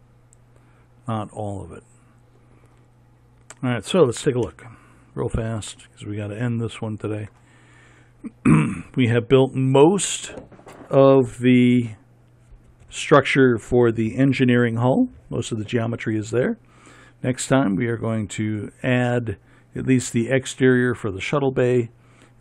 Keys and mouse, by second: 5.0 KP_1, 8.2 middle click.